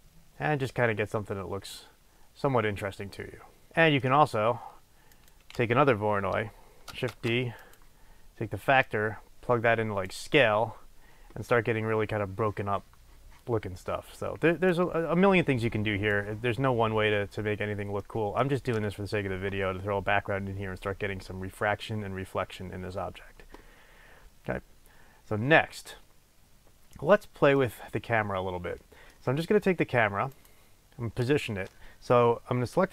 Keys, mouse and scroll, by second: 3.7-5.4 middle drag, 5.4 click, 7.3 shift+d, 7.9 click, 9.0 click, 14.8-18.2 drag, 17.7-18.2 scroll down 2, 18.2 middle click, 18.4-22.2 middle drag, 24.9-27.1 scroll down 1, 27.1-27.7 scroll up 1, 27.7 middle click, 30.4 click.